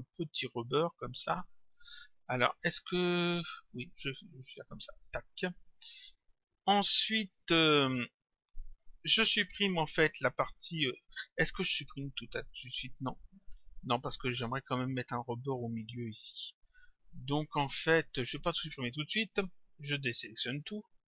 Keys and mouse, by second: 20.5 click.